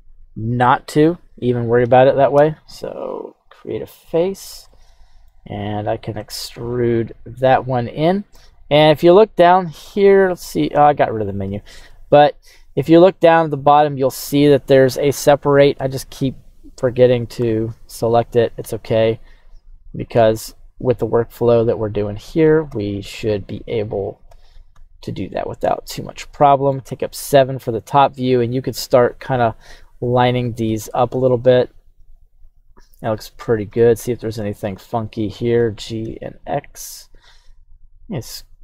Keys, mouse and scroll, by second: 3.3-4.3 drag, 4.7 middle click, 6.1 e, 10.2 right click, 11.8 e, 14.0 click, 17.4 l, 18.6 q, 21.5 Tab, 21.9 right click, 22.7 f, 23.5-24.3 scroll down 1, 24.3 scroll down 1, 24.3 g, 24.7 x, 26.0 click, 26.4 middle click, 26.8 KP_7, 28.9 right click, 30.0 right click, 30.6 g, 31.1 x, 32.6 click, 33.1-33.7 scroll down 2, 33.7 shift+middle click, 34.7 right click, 35.5 g, 36.0 x, 37.2 click, 37.6 s.